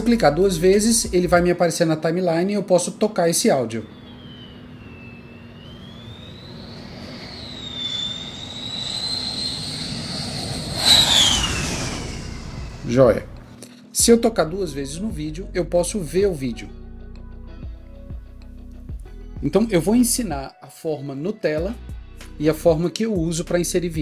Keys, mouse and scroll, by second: 0.1 double click, 14.4 double click.